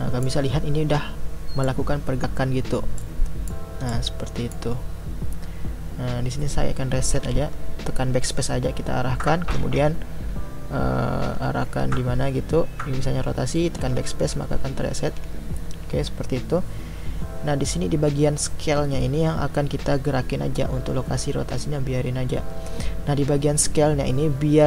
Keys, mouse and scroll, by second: 7.2 BackSpace, 13.8 BackSpace, 15.0 BackSpace.